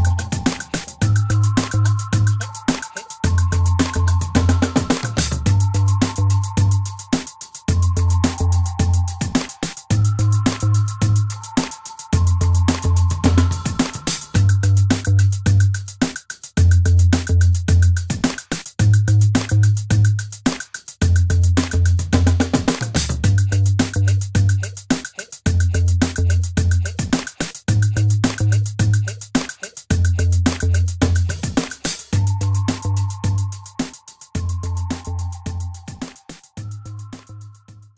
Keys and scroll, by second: 24.5-25.4 typing, 33.3 space.